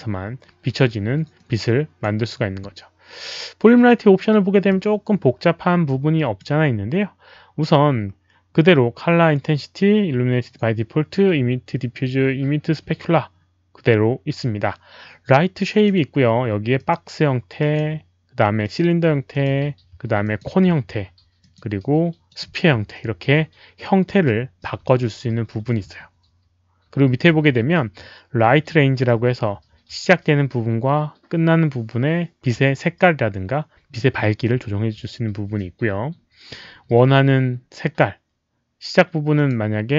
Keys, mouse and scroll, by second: 1.3-2.0 drag, 4.6-6.3 alt+drag, 4.6 middle click, 5.6 middle click, 15.6 click, 16.7 click, 17.5 click, 18.6 click, 19.3 click, 20.2 click, 21.3 click, 22.2 click, 27.6 scroll down 1, 39.3 click.